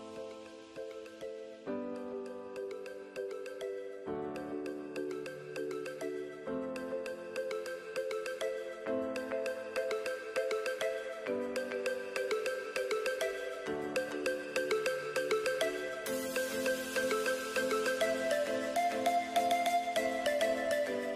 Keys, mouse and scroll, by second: 2.2 click, 4.3 click, 5.4-5.9 scroll up 2, 6.5 scroll up 1, 8.3 click, 11.8 click, 19.1 z, 20.4 ctrl+z.